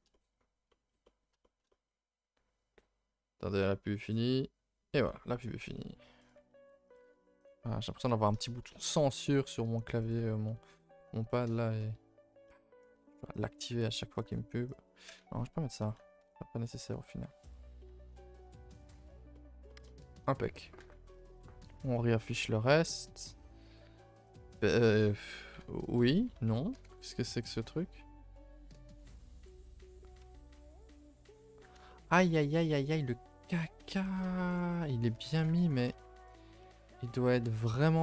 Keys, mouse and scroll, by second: 0.3-0.7 scroll up 4, 0.7-1.9 middle drag, 1.9-3.6 scroll up 4, 6.3 alt+Left, 6.6 r, 7.0 g, 7.8-8.1 scroll down 2, 8.1 middle click, 8.9-9.2 scroll up 3, 9.2 middle click, 9.3 middle click, 10.1 alt+click, 11.3-13.0 shift+middle drag, 13.0 e, 13.7 r, 14.3 g, 15.2 ctrl+z, 15.4 ctrl+z, 15.8 ctrl+z, 16.2 Tab, 17.4 click, 17.8-18.1 middle drag, 18.1 a, 18.3 a, 18.4-18.8 scroll down 4, 19.0 scroll down 1, 19.1-20.8 middle drag, 20.8 alt+h, 21.0 scroll down 2, 21.2 a, 21.3 a, 21.4-22.8 middle drag, 23.2-24.3 middle drag, 24.3 click, 24.8 shift+click, 25.5 g, 26.7 g, 29.5 KP_0, 30.7 scroll down 2, 30.9 a, 31.1 a, 31.4-31.9 scroll down 2, 31.9-32.6 shift+middle drag, 32.6 click, 33.0 click, 33.8 h, 34.6 click, 35.1 a, 35.3 a, 36.3 z, 36.6-37.0 middle drag, 37.0-37.4 scroll up 5, 37.4-37.8 shift+middle drag, 37.8-38.0 scroll up 4.